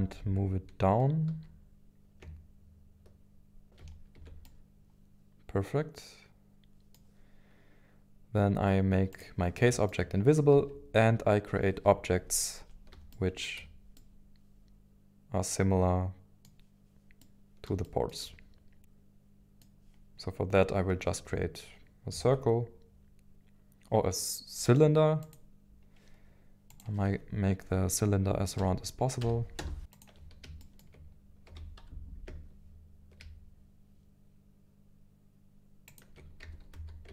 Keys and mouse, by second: 1.2 y, 4.2 Tab, 4.4-6.9 middle drag, 9.1 click, 10.5 KP_1, 11.0 KP_3, 13.1 shift+middle click, 13.9-16.5 middle drag, 17.2 middle click, 18.2-19.7 middle drag, 22.1 shift+a, 26.8-29.8 drag, 29.8 g, 29.8 x, 30.6 shift+middle drag, 31.5 g, 31.8 z, 35.9 ctrl+shift+click, 36.4 g, 36.7 g, 36.7 x.